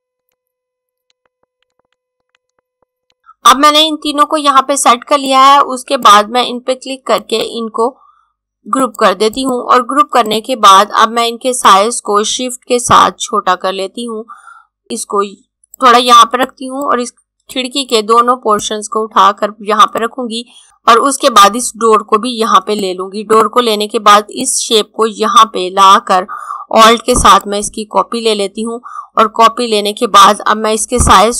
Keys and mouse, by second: 0.2 click, 0.8 ctrl+z, 1.0 click, 1.7 click, 2.3 click, 5.2 click, 7.1 right click, 8.6 click, 14.8 click, 20.9 click.